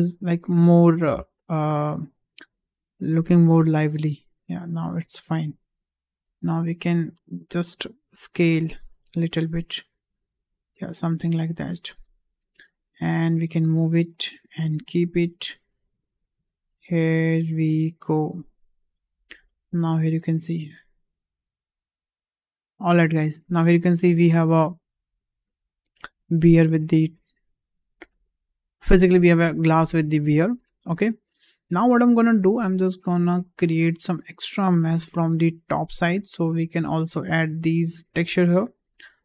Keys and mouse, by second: 1.1 shift+middle click, 2.4 a, 3.5 s, 5.9 shift+middle click, 7.1 click, 9.1 click, 9.3-11.9 drag, 12.5 g, 14.6 s, 19.7 g, 23.5 click, 24.1 Tab, 24.5-28.2 middle drag, 29.9 `, 31.2 shift+middle drag, 32.6 Tab, 33.0 middle click, 33.9 shift+middle click, 34.2 middle click.